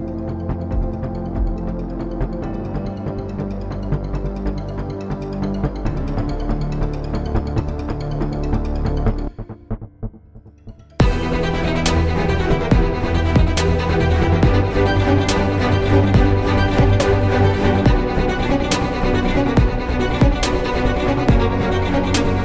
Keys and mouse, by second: 4.0 z, 5.6 z, 7.3 z, 12.0 z, 13.1 x, 19.2 middle click.